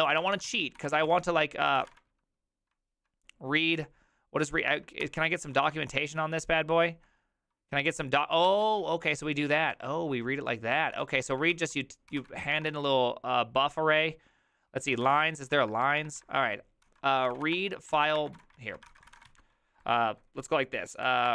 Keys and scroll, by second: 0.0-2.3 typing, 5.0 ctrl+c, 5.0-5.5 typing, 8.4 ctrl+c, 8.8-9.7 typing, 11.0-13.2 typing, 11.5 ctrl+c, 14.7-16.0 typing, 16.3 alt++, 16.8 ctrl+t, 17.0-19.8 typing, 20.8-21.3 typing.